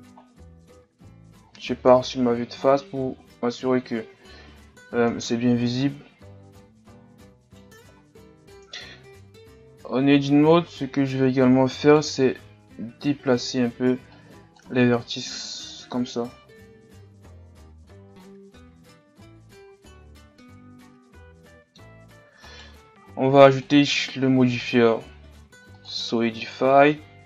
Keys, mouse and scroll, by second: 0.2-0.7 scroll down 2, 0.7 a, 1.3 scroll down 3, 1.9 KP_1, 5.1 KP_3, 5.8-6.9 scroll up 4, 7.5 right click, 7.9-8.3 scroll up 4, 8.7 Tab, 9.6 z, 10.7 scroll up 2, 11.9-14.6 right drag, 14.6 b, 15.3 g, 18.4 z, 18.8-19.2 scroll down 3, 19.2 Tab, 19.7 a, 20.4-21.9 middle drag, 21.9-22.6 scroll up 2, 22.6-24.5 right drag, 25.9-27.2 drag.